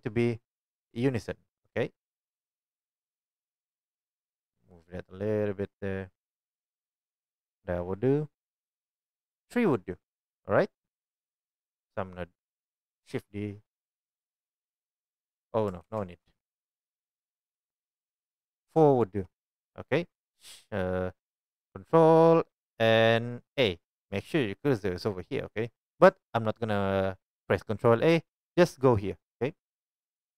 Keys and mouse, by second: 10.3-11.7 drag, 11.8-15.5 drag, 13.1 shift+d, 15.5-18.2 ctrl+middle drag, 15.8 ctrl+z, 18.2-20.0 drag, 20.0 middle click.